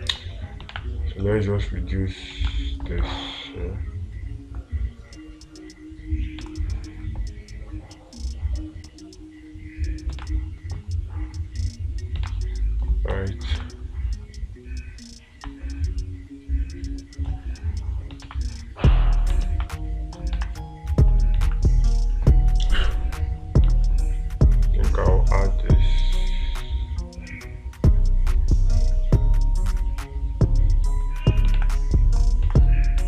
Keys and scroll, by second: 1.2 space, 2.9 space, 6.9 space, 10.7 space, 12.7 space, 14.0 space, 18.7 space, 20.8 space, 21.9 space, 32.0 space.